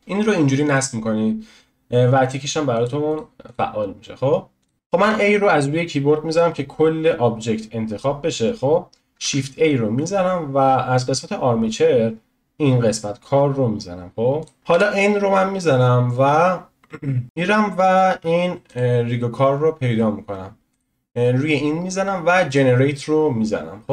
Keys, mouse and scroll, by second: 4.7 n, 5.0 a, 9.2 shift+a, 14.7 n, 18.7-23.6 drag, 23.6-23.9 scroll down 1.